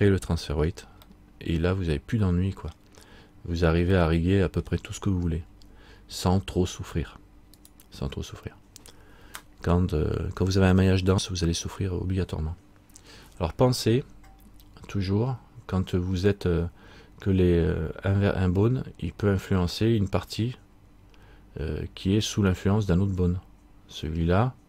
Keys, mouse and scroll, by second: 1.3 middle click, 3.5-4.0 scroll down 1, 4.1 middle click, 7.7 right click, 14.7-16.5 scroll up 1, 16.5-18.1 scroll down 1.